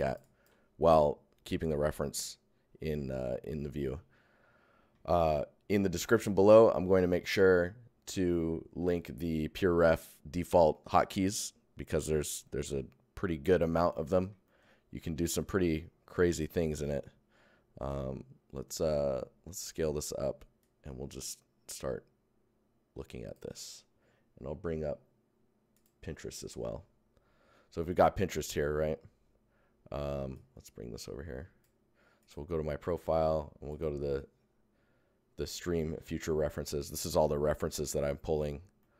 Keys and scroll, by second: 14.4 shift+Tab, 15.5 Tab, 16.7 Tab, 38.7 Tab.